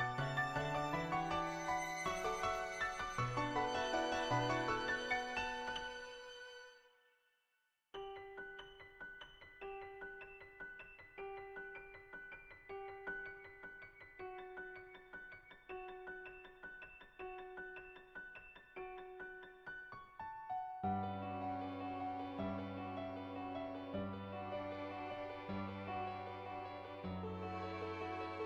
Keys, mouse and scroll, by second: 0.4 click, 1.1 click, 2.0-5.2 drag, 5.4 ctrl+z, 6.0 click, 6.5 click, 7.1 click, 8.0 click, 8.2 click, 8.6 click, 8.8 click, 9.7 click, 10.5 click, 10.8 click, 11.4 click, 11.7 click, 12.2 click, 12.6 click, 13.5 click, 14.5 click, 14.8 click, 15.0 click, 15.5 click, 15.9 click, 16.7 click, 17.9 click, 18.5 click, 20.1 click, 20.5 ctrl+z, 20.7 click, 21.3 click, 21.9 middle click, 22.8 shift+middle click, 23.2 middle click, 23.4 shift+middle click, 25.2 shift+middle click, 25.5 middle click, 26.5 middle click, 27.9 n.